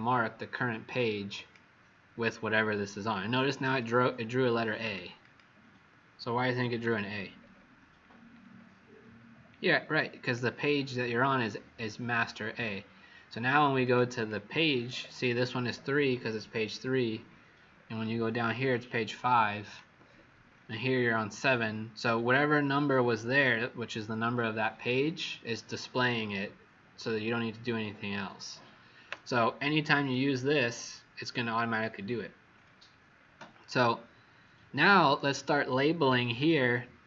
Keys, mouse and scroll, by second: 1.3 click, 3.6 Escape, 4.8 click, 5.1 click, 7.0-7.5 alt+scroll down 2, 10.1 click, 10.1 alt+scroll down 5, 14.1 click, 17.1-19.0 scroll down 14, 19.8-21.6 scroll down 13, 29.9 click, 32.5-33.6 scroll up 14.